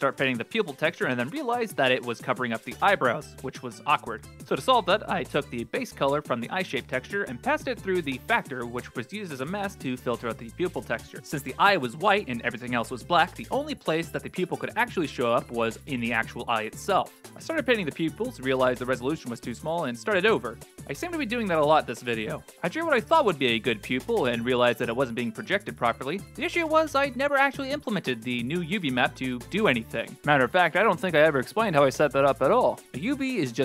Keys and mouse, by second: 2.4 click, 7.0 middle click, 8.2-9.5 drag, 13.6 ctrl+z, 15.8 ctrl+space, 16.4 click, 17.3 f, 17.4 click, 19.2 ctrl+space, 19.9-20.2 middle drag, 20.4 ctrl+z, 21.0 ctrl+space, 22.5 click, 24.4 ctrl+space, 26.4 middle click, 26.6 Tab, 27.0 middle click, 31.0 click.